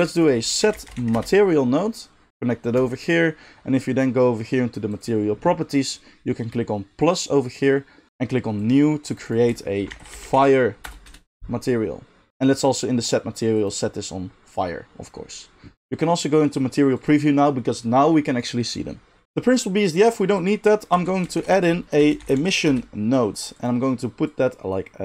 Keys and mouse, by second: 7.0 click, 7.0 middle click, 9.1 right click, 12.3-13.6 right drag, 17.0-20.3 right drag, 20.3 middle click, 20.4-25.0 right drag, 20.9 x, 21.3 shift+a, 24.2-25.0 drag, 24.2-25.0 middle drag.